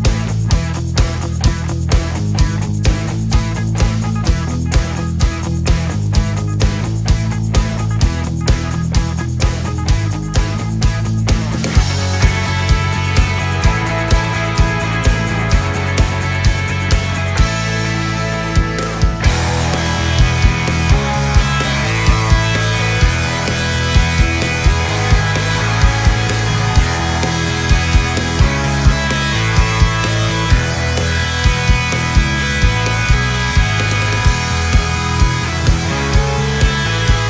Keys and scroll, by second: 17.9 ctrl+z, 18.4 ctrl+z.